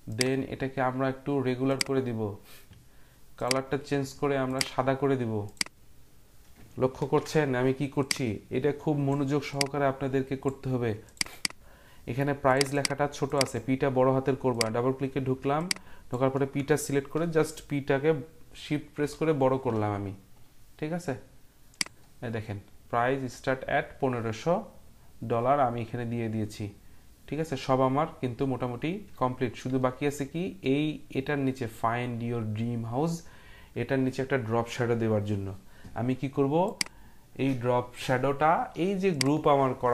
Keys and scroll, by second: 7.0 ctrl+t, 19.0 p.